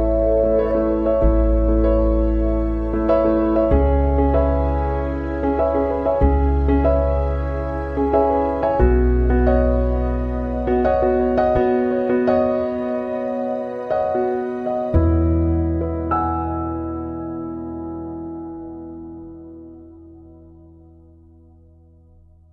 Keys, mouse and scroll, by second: 1.4 click, 3.1-3.4 scroll up 1, 3.6 scroll up 1, 4.4-5.2 scroll up 2, 5.2-5.6 scroll down 2, 6.0-6.4 scroll down 1, 6.5 space, 6.8 click, 7.1 space, 8.3 click, 9.1 click, 9.7 space, 10.0 click, 10.2 space, 14.0 click, 14.7 space, 16.5 shift+click, 17.2 right click, 18.8 click, 21.5 click, 22.4 click.